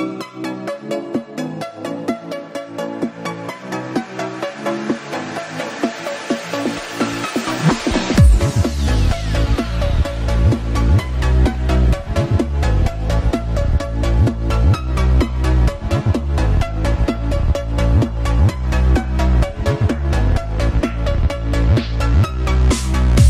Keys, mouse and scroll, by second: 0.1-1.3 scroll up 7, 1.3 click, 2.4 KP_1, 2.9-3.5 scroll up 4, 3.5 s, 6.2-7.6 scroll down 4, 7.6-8.0 scroll up 5, 8.0 s, 9.8-13.4 drag, 13.7 KP_7, 15.4-16.3 scroll up 4, 16.3-17.7 shift+middle drag, 17.7 s, 20.9 click, 22.1 shift+a.